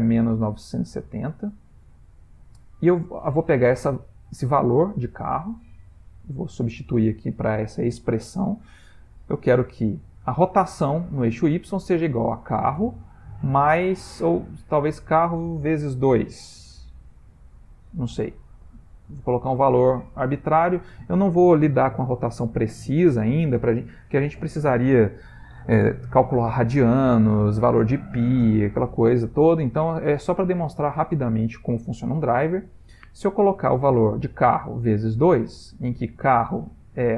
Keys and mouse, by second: 9.3 r.